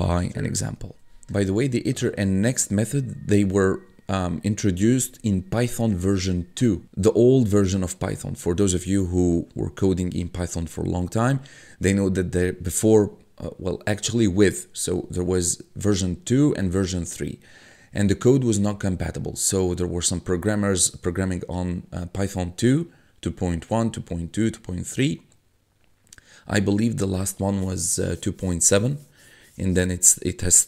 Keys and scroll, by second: 0.9 ctrl+F1, 2.0 1.